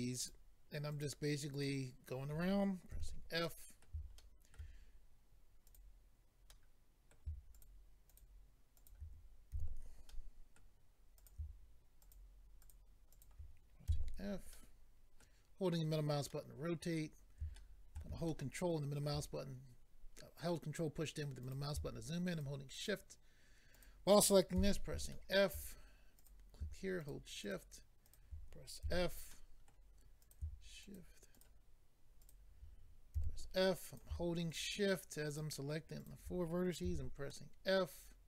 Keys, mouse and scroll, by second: 0.2 shift+click, 0.9 shift+click, 1.5 shift+click, 2.9 f, 3.4 middle click, 4.2 shift+middle click, 5.7 click, 6.5 click, 6.5 middle click, 7.5 shift+click, 9.5 f, 10.1 middle click, 11.2 click, 12.0 shift+click, 12.6 shift+click, 13.1 shift+click, 13.2 shift+double click, 13.9 f, 14.5 middle click, 16.3 middle click, 17.5 shift+middle click, 18.3 ctrl+middle click, 21.4 click, 22.3 shift+click, 22.7 shift+click, 23.7 shift+click, 24.5 f, 25.1 shift+middle click, 26.1 click, 27.0 shift+click, 27.4 shift+click, 28.0 shift+click, 28.8 f, 29.3 middle click, 30.2 click, 30.8 shift+click, 31.3 shift+click, 32.2 shift+click, 33.2 f, 33.9 click, 34.5 shift+click, 35.3 shift+click, 36.0 shift+click, 36.9 f, 37.3 middle click.